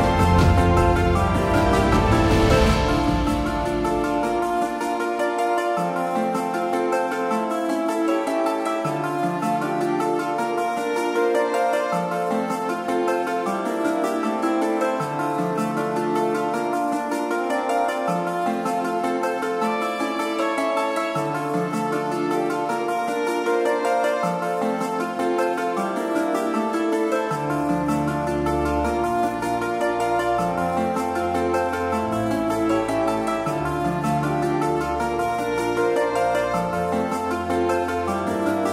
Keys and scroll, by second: 24.4 super+t, 28.7 Return.